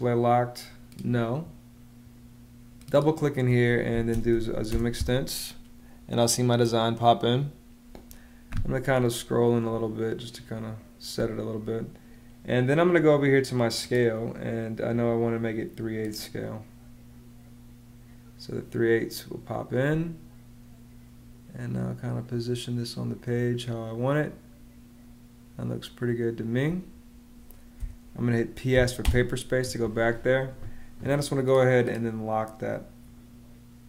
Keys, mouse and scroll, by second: 3.8-5.3 typing, 9.6 space, 19.7 space, 27.6 p, 28.6 s, 28.9 space, 29.8 space.